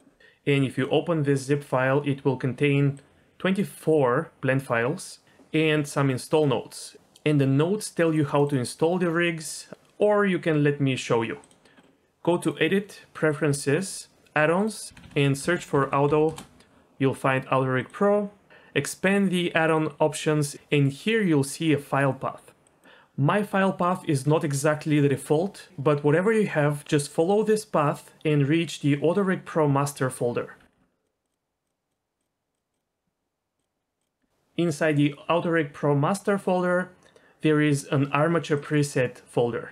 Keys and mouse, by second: 11.8 middle click, 12.4-13.4 drag.